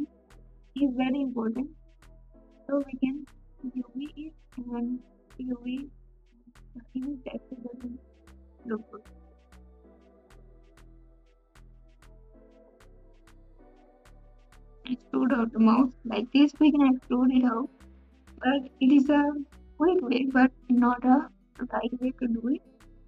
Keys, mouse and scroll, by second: 0.4 3, 2.5-4.1 right drag, 4.1 alt+shift+s, 7.7 alt+z, 7.7 g, 9.5 r, 16.3 alt+z, 16.3 ctrl+KP_Add, 17.6 s.